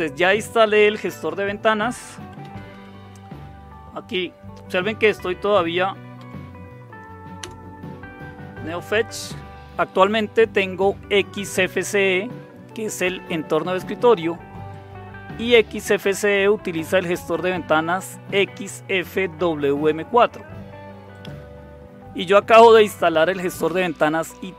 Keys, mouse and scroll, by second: 1.9-3.2 typing, 5.5 Up, 6.1 Up, 7.4 Return, 14.7-17.4 drag, 21.1 click.